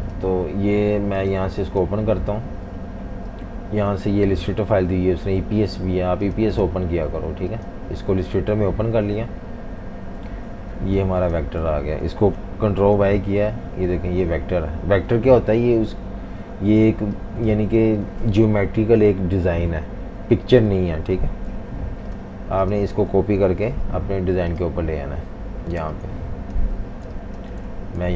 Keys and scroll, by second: 10.8 z, 11.7 v, 12.9 super+y, 17.8 super+z, 21.3 super+y, 23.4 super+c, 25.7-26.8 typing, 28.0 super+v.